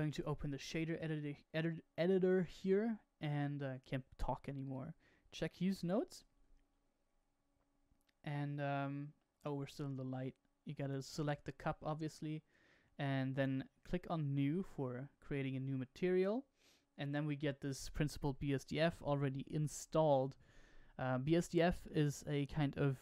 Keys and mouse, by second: 0.1-1.1 drag, 2.3 n, 4.6 click, 8.3 shift+middle click, 11.0 click, 15.6-17.1 shift+middle drag.